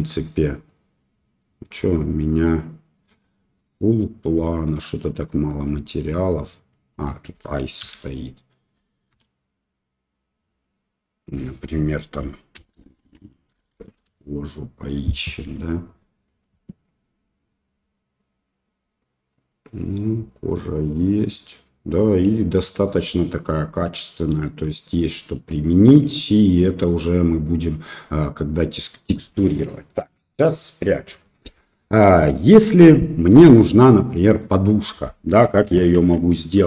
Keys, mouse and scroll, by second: 6.9 click, 11.2 click, 28.5 click, 29.1 middle click, 30.5 middle click, 33.5 middle click, 35.9 shift+a.